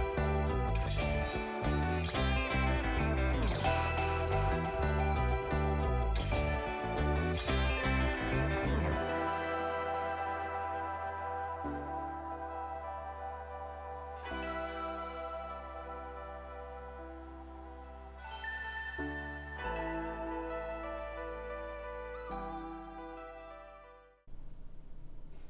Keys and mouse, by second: 12.3 click, 12.8 KP_0, 13.6 middle click, 15.6 middle click, 15.9 middle click, 16.0 middle click, 16.5 middle click, 17.8 middle click, 18.7 click, 24.2-25.3 drag, 25.3-25.4 middle drag.